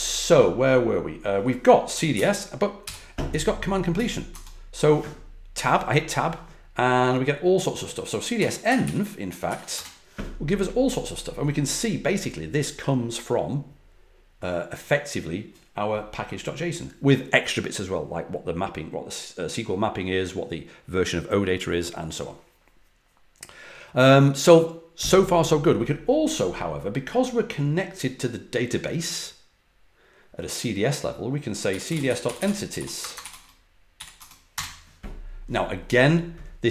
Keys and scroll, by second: 1.6-2.8 typing, 3.9-4.3 typing, 8.1-9.3 typing, 9.4 ctrl+l, 9.7 Return, 31.4-34.5 typing.